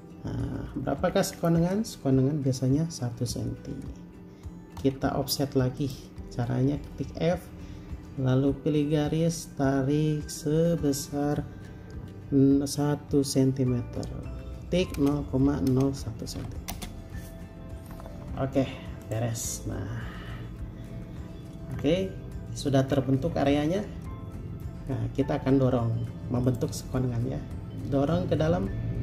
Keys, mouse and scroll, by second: 0.7 scroll up 1, 5.0 typing, 15.2-16.6 typing, 16.9 Return, 18.4 space, 20.0-20.3 scroll up 1, 21.9-23.0 scroll down 1, 23.0-25.6 scroll up 1, 25.6 typing.